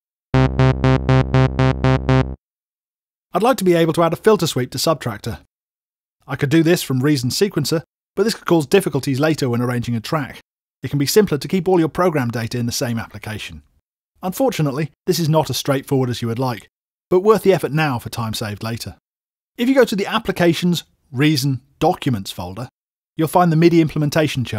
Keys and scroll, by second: 0.3 space, 2.6 space, 18.0 super+Tab, 18.6 super+Tab.